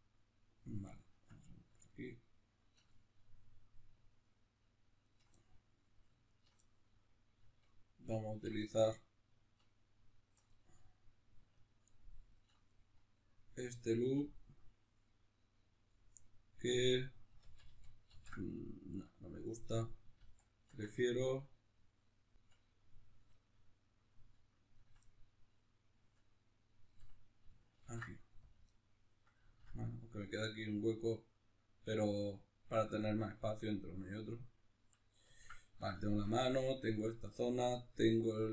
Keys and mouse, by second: 1.0-2.9 ctrl+right drag, 2.9-4.2 middle drag, 4.2-5.4 ctrl+right drag, 5.4 middle click, 6.3 ctrl+right click, 6.6-7.6 middle drag, 7.6-8.6 ctrl+right drag, 8.6 middle click, 9.5-10.5 ctrl+right drag, 10.5-11.5 middle drag, 11.5-12.8 ctrl+right drag, 12.8-23.0 middle drag, 17.4 ctrl+z, 20.2 ctrl+z, 23.0 shift+right click, 23.4-24.7 middle drag, 24.7 ctrl+right click, 25.0-26.2 middle drag, 26.2-27.8 ctrl+right drag, 27.8 ctrl+e, 28.7-38.5 middle drag.